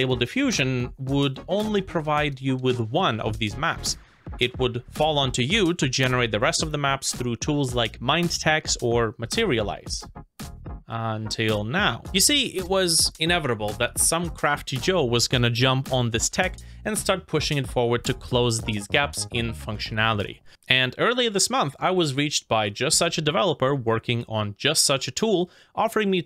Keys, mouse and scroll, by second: 9.2 right click.